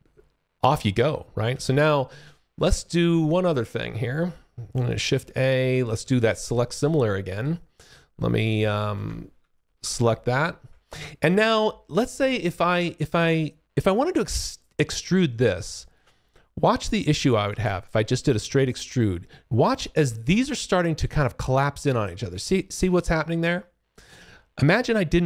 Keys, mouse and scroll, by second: 2.6 alt+click, 3.8 click, 4.4 a, 4.8 click, 5.0 a, 7.3 click, 9.5 shift+click, 10.2 alt+click, 12.2 alt+click, 13.4 alt+click, 14.0 alt+middle click, 15.6 alt+click, 17.4 shift+f, 18.1 click, 20.9 click.